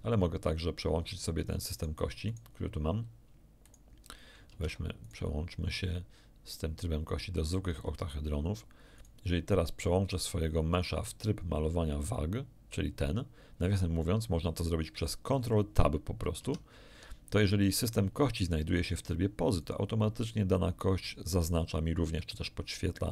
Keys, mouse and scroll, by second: 1.7 right click, 2.2 right click, 3.6 right click, 4.5 ctrl+Tab, 5.0 ctrl+right click, 7.3 click, 8.9 right click, 12.0 click, 16.3 ctrl+Tab, 22.1-23.1 middle drag.